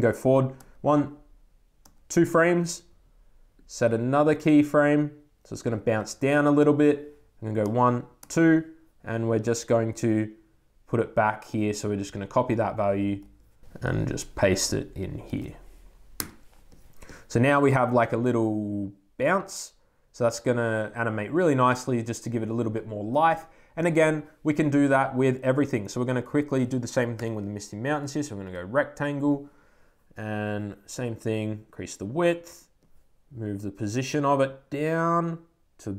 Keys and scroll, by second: 0.4 Right, 1.7 Right, 7.5 Right, 16.1 super+Return, 29.1 Return.